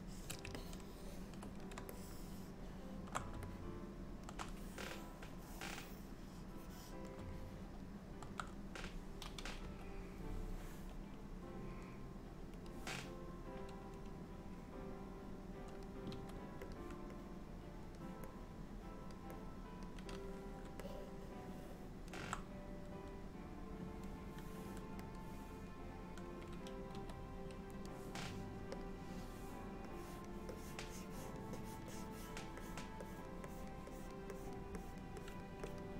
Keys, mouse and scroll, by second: 0.6 ctrl+middle click, 2.1 shift+middle click, 3.6 middle click, 4.7 click, 6.6 click, 7.4 middle click, 9.7 KP_1, 12.7 click, 14.7 click, 16.2 f, 17.2 click, 18.4 click, 19.4 click, 20.9 middle click, 25.2 click, 27.0 f, 28.9 click, 30.0 click, 30.6 click, 31.0 click, 31.6 click, 32.0 click, 32.7 click, 33.1 click, 33.6 click, 34.0 click, 34.4 click, 34.9 click, 35.3 click, 35.8 click.